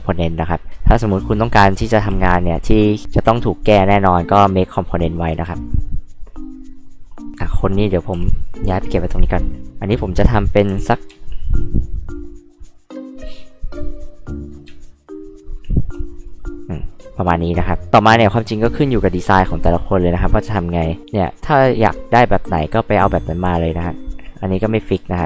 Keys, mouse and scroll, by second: 2.1 m, 4.9-6.3 drag, 7.3 drag, 8.1 m, 8.6 click, 10.7 m, 11.8 ctrl+click, 12.9 ctrl+click, 13.8 ctrl+click, 15.6 ctrl+click, 18.5 click, 20.3 click, 21.8-23.6 drag, 24.7 click.